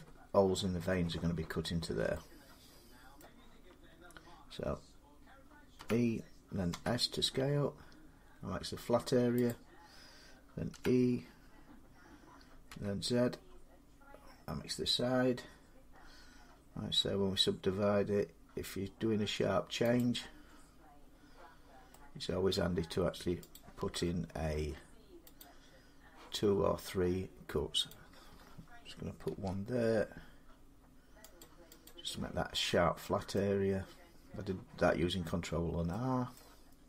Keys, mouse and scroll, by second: 3.0 middle click, 5.6-8.1 middle drag, 5.6-6.5 typing, 9.3-14.4 drag, 10.5 e, 12.5 z, 19.8 click, 21.7 middle click, 21.9 scroll up 1, 22.4 middle click, 23.4 click, 25.2 click, 27.7 click, 29.1 ctrl+r, 30.3 scroll, 31.2 click, 31.7 click, 32.8 scroll up 1, 33.2 middle click, 33.5-33.8 scroll up 2, 36.2 middle click.